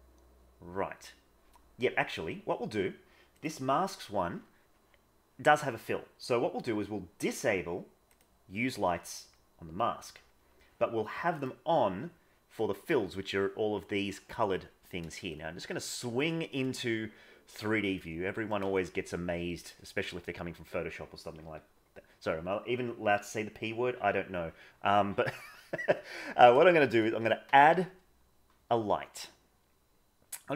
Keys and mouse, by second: 8.0 click, 15.3-16.2 shift+middle drag, 18.0-18.5 middle drag, 18.7-19.7 shift+middle drag, 27.4 shift+a.